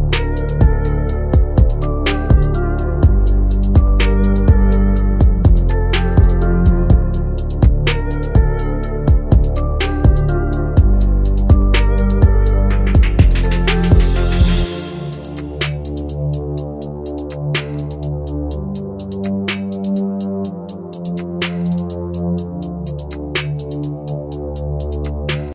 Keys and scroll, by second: 12.7 Escape, 13.7 Delete, 16.7 c, 17.1 F3, 17.5 Escape, 18.6 shift+F2, 19.4 F9.